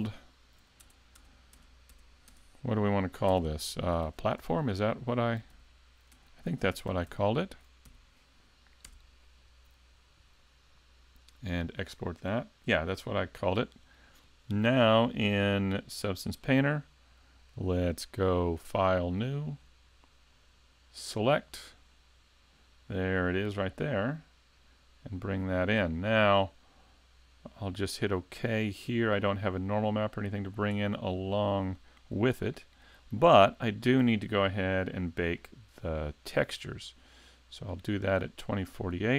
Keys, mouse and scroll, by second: 11.7 click.